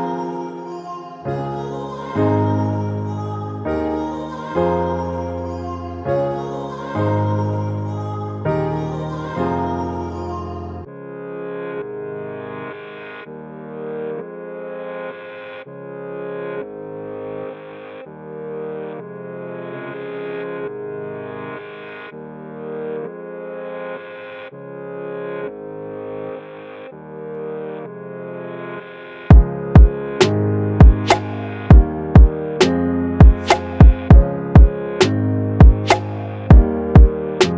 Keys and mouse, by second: 27.8 right click.